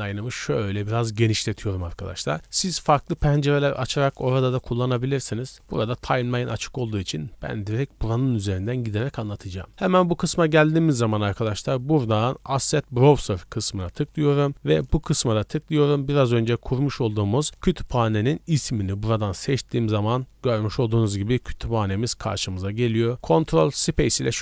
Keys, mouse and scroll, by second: 0.0 click, 0.9 scroll down 1, 1.2-1.5 middle drag, 2.0 shift+middle drag, 9.7-13.3 drag, 14.9-18.6 drag.